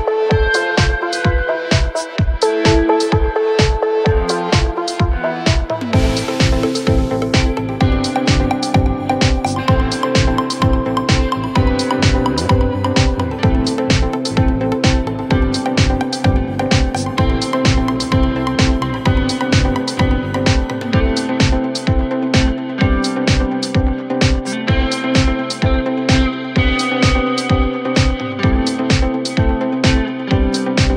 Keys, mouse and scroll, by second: 0.3 right click, 2.5 typing, 2.6 Return, 3.2 double click, 3.3 double click, 3.4 right click, 4.0-7.6 typing, 4.3-5.1 scroll up 11, 5.1-5.5 scroll down 11, 5.7 scroll up 4, 8.3 Delete, 8.5 scroll down 4, 8.7 middle click, 9.2 scroll up 1, 9.5 scroll down 5, 9.9 ctrl+s, 10.3 middle click, 11.2 space, 11.6 middle click, 11.9 middle click, 12.2 scroll up 7, 12.4 middle click, 12.9 typing, 13.5-14.3 scroll down 6, 14.3 r, 14.6 double click, 14.7 right click, 15.6 double click, 15.7 double click, 16.2-17.8 typing, 18.8 m, 19.0-19.3 scroll up 6, 19.8 scroll up 4, 19.8-20.2 scroll down 20, 20.4 scroll up 5, 21.3 scroll down 1, 21.6 middle click, 22.0-22.9 typing, 23.2 scroll up 3, 24.1 typing, 25.0-25.8 scroll up 18, 25.9-26.2 scroll down 7, 28.7 n, 29.2 middle click, 29.5 scroll down 2, 29.8-30.3 scroll up 6, 30.9 s.